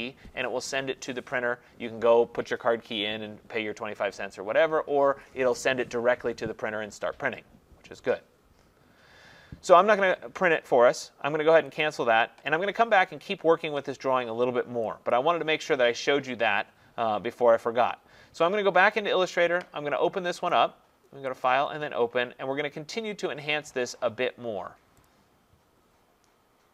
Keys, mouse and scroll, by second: 11.8 click, 15.1 click, 19.0 click, 20.5 click, 21.5 click, 25.1 click.